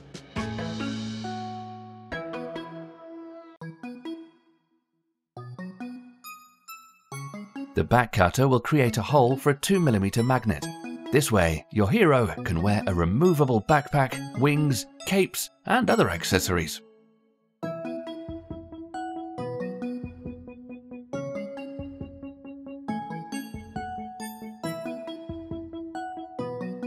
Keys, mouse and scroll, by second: 0.0-0.9 middle drag, 1.1 r, 1.3-2.1 middle drag, 2.6 g, 2.8 middle click, 3.0-3.4 scroll up 3, 3.4 click, 3.5-3.9 middle drag, 3.9 g, 4.4 middle click, 4.6 scroll down 2, 4.9 click, 5.1-5.6 scroll down 9, 5.3 middle drag, 5.6 shift+middle click, 6.7 click, 7.2 click, 7.4-7.9 scroll down 3, 7.5 middle click, 7.9 middle drag, 8.6 click, 9.2-10.2 middle drag, 10.2 shift+d, 11.6-12.0 scroll up 7, 13.0 KP_Decimal, 13.7 scroll down 1, 13.9-14.8 middle drag, 14.8-15.2 scroll down 1, 15.2-16.0 shift+middle drag, 16.0 g, 17.2 middle click, 17.7 g, 20.6-22.0 shift+middle drag, 22.0 g, 23.0-24.2 middle drag, 24.2-24.8 scroll up 6, 24.8-25.3 middle drag, 25.3 r, 26.4-26.8 middle drag.